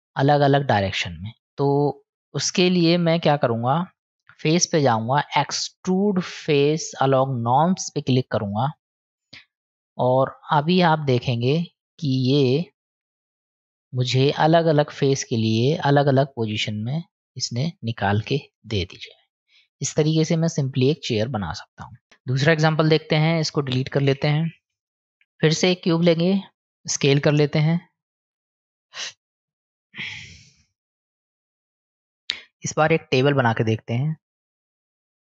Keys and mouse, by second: 1.4 click, 4.4-15.2 drag, 16.8-20.9 middle drag, 23.0 Tab, 23.8 click, 24.7 Delete, 26.0 shift+a, 27.7 click, 29.7-30.8 drag, 31.6 click, 33.1-34.0 middle drag, 34.9 click.